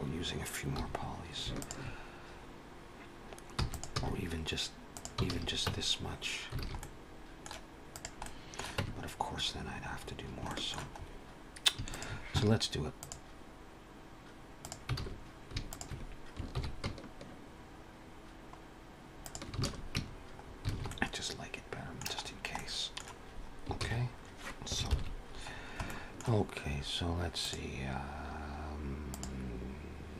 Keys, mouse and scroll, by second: 0.0 Tab, 0.0 click, 0.0-0.4 scroll up 1, 0.6 2, 1.4 alt+shift+click, 3.4 e, 3.8 s, 5.1 alt+a, 5.5 Tab, 6.4 alt+a, 6.6 middle click, 7.8 click, 8.1 middle click, 8.6 Tab, 10.3 shift+middle click, 10.8-11.5 scroll up 2, 11.7 alt+shift+click, 12.8 click, 14.8 alt+a, 15.4 alt+shift+click, 16.4 ctrl+b, 19.4 alt+a, 19.8 Tab, 20.2 scroll down 3, 20.5 alt+a, 20.7 middle click, 22.1-22.8 scroll down 2, 22.4 middle click, 23.7 ctrl+s, 23.8-24.6 scroll down 1, 24.6 scroll down 2, 24.7 ctrl+KP_7, 25.3 scroll down 2, 25.7 shift+middle click, 27.2 click.